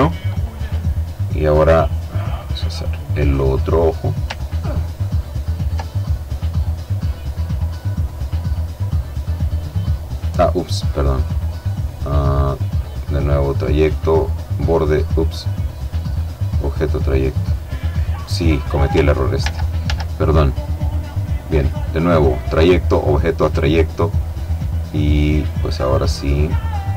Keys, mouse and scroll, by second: 1.3 click, 3.4-6.6 ctrl+drag, 6.8-9.8 drag, 11.6 click, 12.2 click, 13.1 click, 14.8 click, 15.4 click, 16.7 click, 18.5 ctrl+z, 19.9 click, 21.3 click, 23.3-26.3 drag, 26.6-26.9 drag.